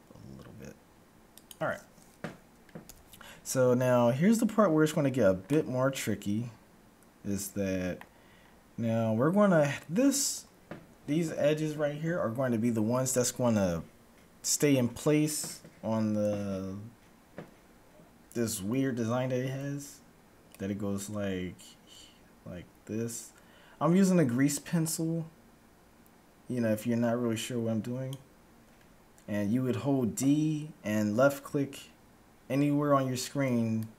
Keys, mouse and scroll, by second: 2.8 a, 4.3-7.3 middle drag, 8.3-10.3 middle drag, 19.7-20.3 d, 20.3-22.2 drag, 28.2-28.7 d, 33.3 d.